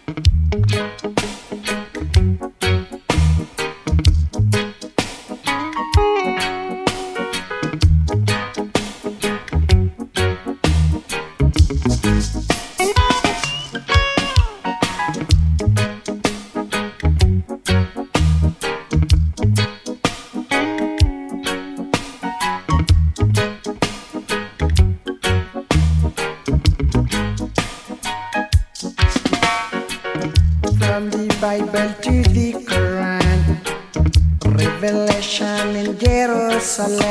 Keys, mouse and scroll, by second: 2.0 ctrl+click, 4.7 click, 17.6-18.6 alt+scroll up 1, 19.0 ctrl+click, 21.7 ctrl+click, 24.2 click, 26.9-27.2 scroll up 1, 28.1-32.7 drag, 35.6 shift+click.